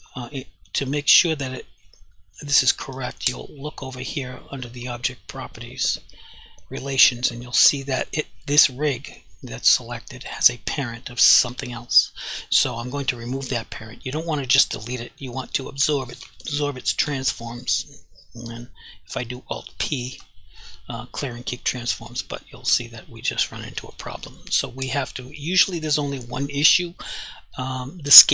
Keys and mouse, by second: 20.0 alt+p, 21.6 click.